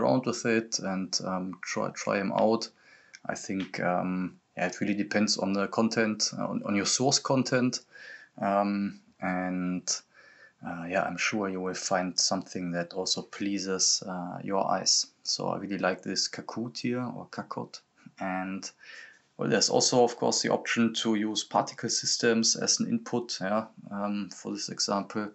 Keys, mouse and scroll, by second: 2.4 click, 4.8 click, 11.3 click, 14.0 scroll down 1, 15.0-24.3 drag, 24.3-25.3 drag.